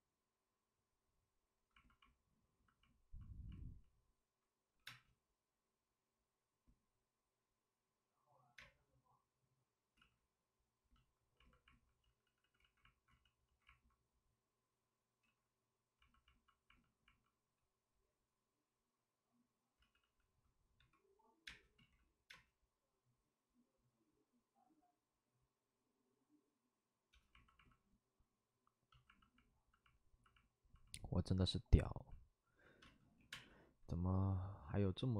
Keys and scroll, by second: 4.8 5, 4.8 space, 8.5 space, 9.9 ctrl+z, 11.9 ctrl+z, 12.0 ctrl+z, 12.1 ctrl+z, 12.3 ctrl+z, 19.7 ctrl+z, 19.9 ctrl+z, 20.7 5, 21.4 space, 22.2 space, 32.8 space, 33.1 3, 33.2 space.